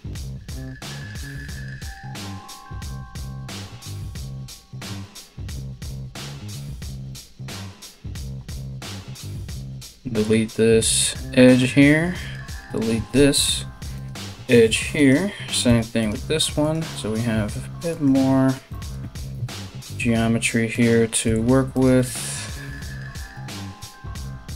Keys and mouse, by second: 8.1 2, 8.5 right click, 9.2 x, 11.9 right click, 12.0-14.6 middle drag, 12.5 x, 14.6 right click, 14.7-16.2 middle drag, 15.3 x, 16.2 right click, 16.3-17.5 middle drag, 17.5 right click, 17.6-24.5 middle drag, 18.9 KP_3, 20.3 right click, 20.8 x, 22.8 right click, 23.4 x.